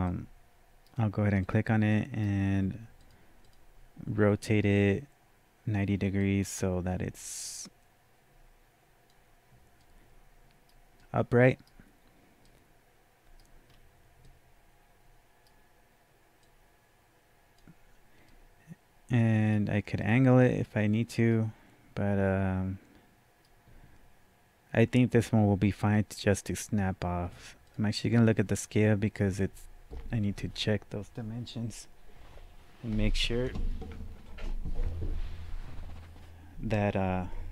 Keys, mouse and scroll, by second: 0.1-3.0 right drag, 3.0 click, 6.2-11.0 drag, 9.8-14.2 right drag, 11.3-12.5 drag, 13.7-14.2 scroll down 1, 14.2-37.5 right drag, 14.3 scroll down 1, 16.4-21.3 drag, 27.6 click.